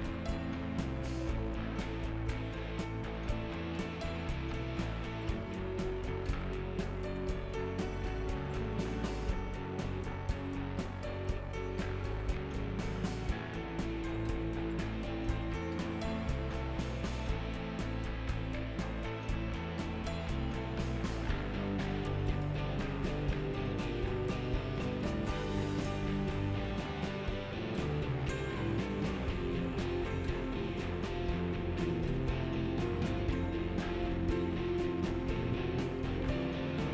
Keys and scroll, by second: 14.7 ctrl+z.